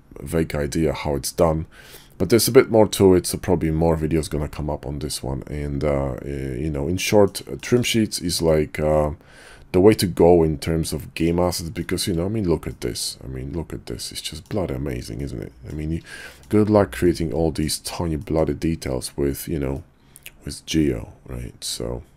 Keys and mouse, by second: 6.9 middle click, 7.6 shift+middle click, 8.4-11.2 middle drag, 11.8 shift+middle drag, 12.7-14.4 middle drag, 15.2-15.6 middle drag, 16.2 shift+middle click, 17.0 middle click, 18.2 shift+middle drag, 19.7-22.1 middle drag.